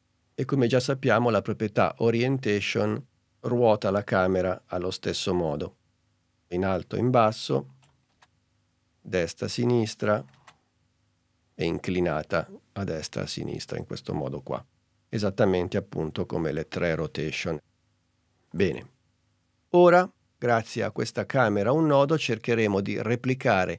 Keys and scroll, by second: 8.2 super+z, 10.5 super+z, 16.8 super+z.